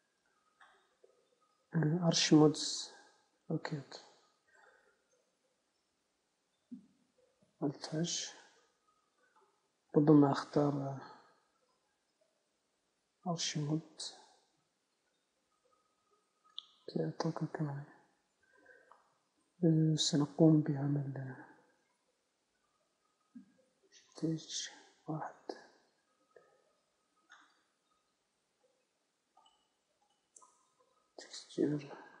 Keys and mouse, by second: 5.9 Tab, 6.4 z, 6.9 z, 8.2 alt+h, 9.8-11.6 right drag, 10.6 z, 11.2 z, 12.4 z, 14.5 Tab, 17.1 Tab, 21.9-24.5 right drag, 24.5 shift+h, 25.3 KP_1, 26.5 KP_3, 29.7-32.2 drag.